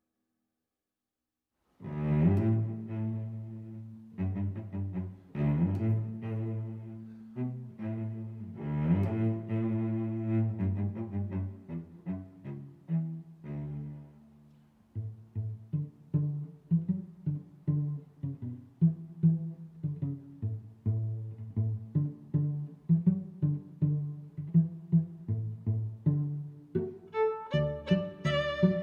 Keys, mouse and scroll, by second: 0.3 middle click, 1.3 click, 2.0 click, 2.8 click, 3.6 s, 3.8 z, 7.2 click, 8.5 click, 9.4 click, 9.9 s, 10.1 z, 12.7 click, 13.2 middle click, 14.0 g, 14.2 z, 15.8 click, 16.6 click, 17.4 click, 18.5 click, 18.6 click, 20.2 s, 20.6 x, 22.6 click, 24.3 click, 24.9 click, 25.5 click, 25.8 middle click, 26.1 click, 26.4 click, 26.7 click, 27.5 Tab, 27.7 click, 27.9 Tab, 28.3 click, 28.7 click.